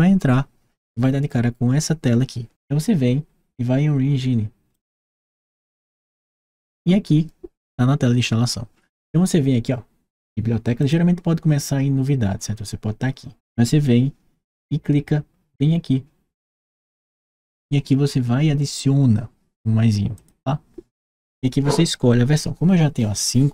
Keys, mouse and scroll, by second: 4.5 click, 10.6 click, 16.2 click, 19.9 click.